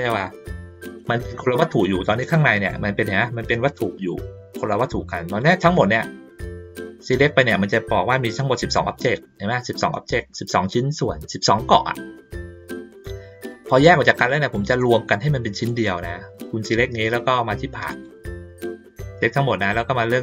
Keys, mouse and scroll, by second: 1.9-2.4 drag, 5.3 click, 5.7 click, 17.9 click.